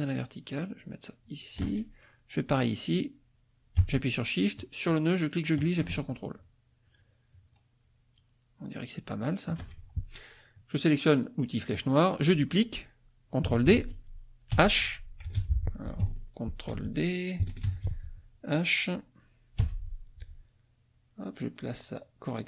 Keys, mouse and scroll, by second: 4.6-9.7 shift+drag, 11.6 click, 13.7 shift+d, 14.5 h, 15.4 ctrl+z, 17.6 ctrl+d, 19.6 h, 21.2-22.4 drag.